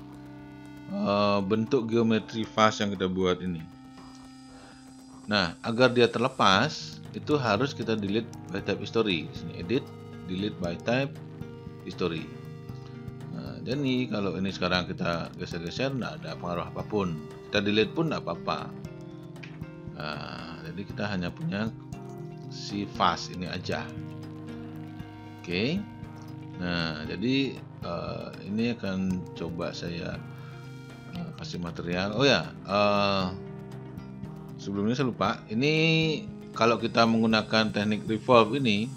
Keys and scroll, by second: 3.7 z, 19.5 Delete.